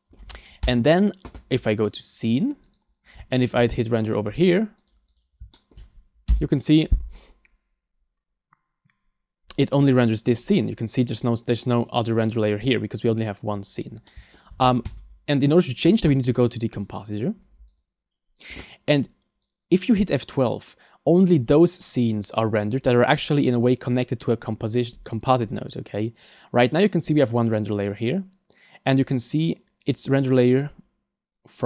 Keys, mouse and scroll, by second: 5.2 shift+middle click, 5.2 click, 5.6 shift+middle click.